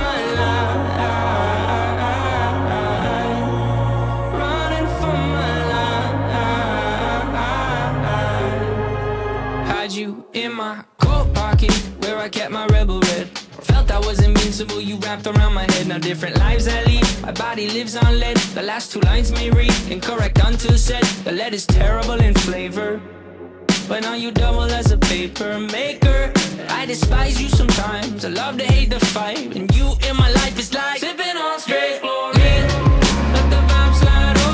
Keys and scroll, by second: 0.0 shift+d, 3.4 w, 5.6 x, 6.4 x, 7.7 t, 8.3 ctrl+space, 22.1 f, 28.0 f, 29.0 `.